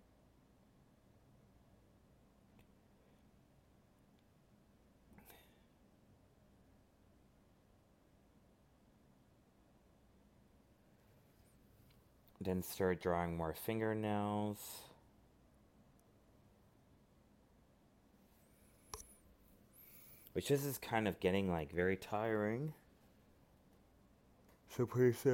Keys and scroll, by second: 1.5 alt+space, 5.3 ctrl+i, 5.6 ctrl+z, 8.5 alt+space, 9.7 ctrl+z, 12.6 alt+space, 19.1 alt+space, 20.8 ctrl+z, 22.8 alt+space.